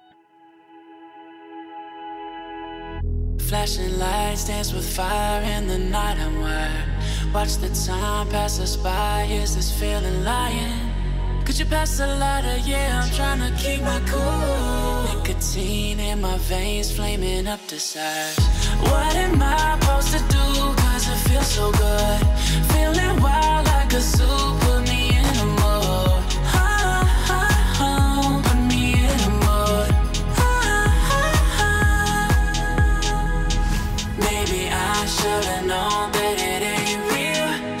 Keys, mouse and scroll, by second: 0.5-1.6 drag, 3.1-4.4 drag, 4.8-5.4 click, 5.7 alt+scroll up 1, 6.5-7.2 shift+drag, 8.2 alt+scroll up 1, 9.2-9.8 shift+drag, 11.0-11.4 alt+scroll down 1, 11.4 alt+scroll up 1, 13.1-13.6 shift+click, 14.0 alt+scroll down 1, 14.5 click, 15.3 alt+scroll up 1, 15.9 click, 19.2 ctrl+z, 22.2-22.7 click, 25.2-25.7 shift+click, 26.1-26.5 alt+scroll down 1, 26.5 alt+scroll up 1, 27.3-28.0 click, 28.0 alt+scroll up 1, 29.0-29.3 shift+click, 29.9-30.7 click, 31.7-32.6 shift+click, 32.9-33.3 alt+scroll down 2, 33.3 click, 33.7-34.8 alt+scroll up 2, 34.8 click.